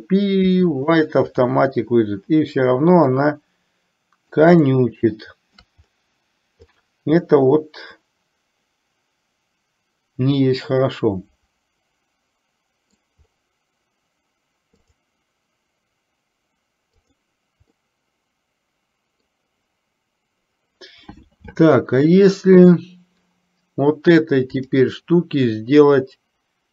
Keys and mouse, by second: 3.3-4.5 middle drag, 5.0-5.8 shift+middle drag, 7.5-13.4 middle drag, 14.8 click, 17.9-19.5 middle drag, 24.8-26.7 drag.